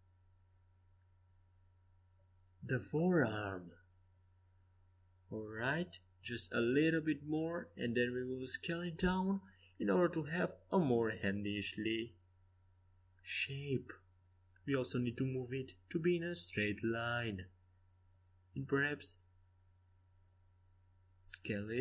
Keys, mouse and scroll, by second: 3.6-7.9 middle drag, 4.8 e, 11.4 s, 15.4 g, 17.3 r.